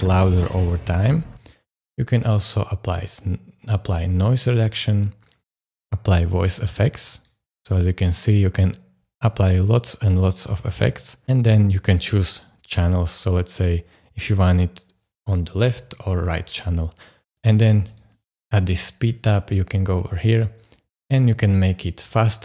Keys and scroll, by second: 1.3 space.